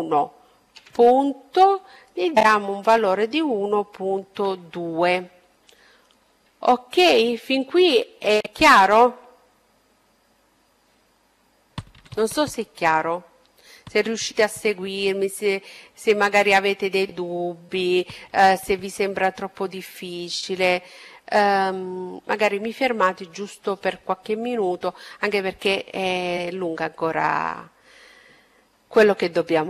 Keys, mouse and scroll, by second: 5.0-6.9 middle drag, 19.0-21.0 middle drag, 27.1-29.6 middle drag.